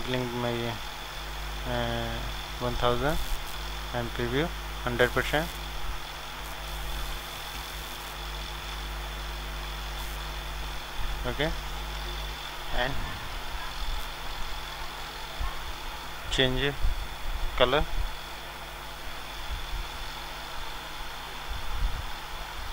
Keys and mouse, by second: 2.7 KP_0, 7.6-11.1 drag, 7.6 KP_0, 11.1-22.7 middle drag.